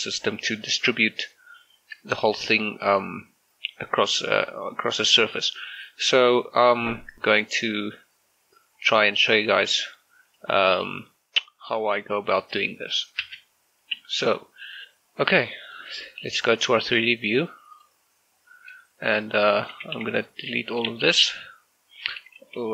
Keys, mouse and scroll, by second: 13.3 shift+space, 14.7 click, 19.1 shift+middle click, 19.5 right click, 19.8 a, 20.0 a, 20.9 Delete, 21.4 click.